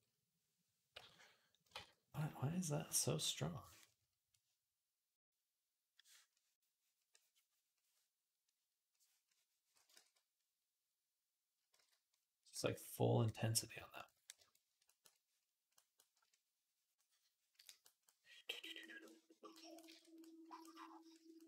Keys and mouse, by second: 0.8 i, 1.6 ctrl+z, 9.8 ctrl+z, 11.6 ctrl+z, 12.5 ctrl+z, 13.9-16.0 shift+middle drag, 17.4 middle click, 17.9 click, 17.9 middle click, 17.9 right click, 18.2 click, 18.2 middle click, 18.2 right click, 18.6 click, 18.6 middle click, 18.6 right click, 20.1 click, 20.1 middle click, 20.1-21.3 right drag, 21.3 click.